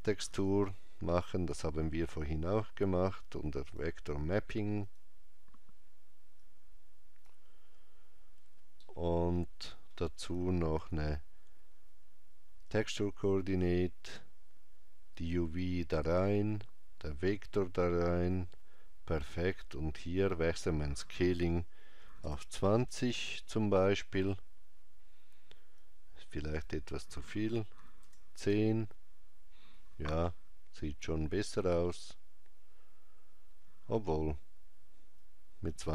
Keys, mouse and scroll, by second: 0.1 shift+a, 6.3 click, 8.7 middle click, 10.6 shift+a, 15.1 click, 25.7 click, 35.0 click.